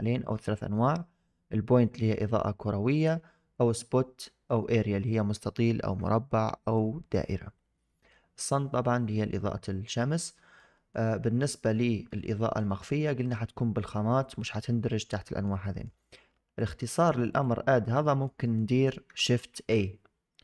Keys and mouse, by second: 10.5-10.8 middle drag, 11.3 shift+middle click, 12.0 shift+middle drag, 12.3 middle drag, 12.6 shift+middle drag, 14.8 middle drag, 15.1 shift+middle drag, 15.5 middle drag, 17.3 click, 17.9 middle drag, 18.3 shift+click, 18.6 middle click, 19.4 shift+a.